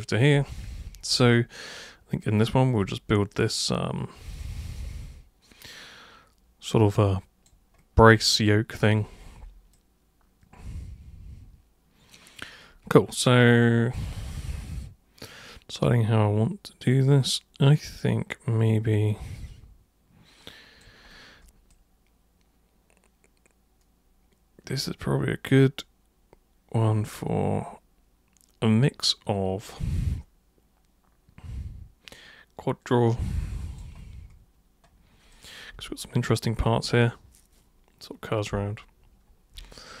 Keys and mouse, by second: 1.3 alt+super+click, 4.4-7.5 alt+super+drag, 9.8-33.8 alt+super+drag, 35.3 alt+super+click, 39.8-40.0 alt+super+drag.